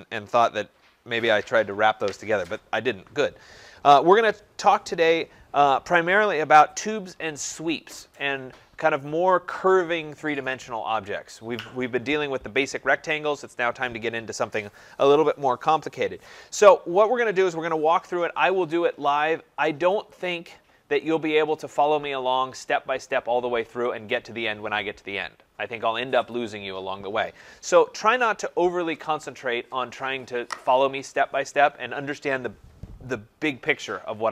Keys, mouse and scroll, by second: 20.0 click, 20.3 click.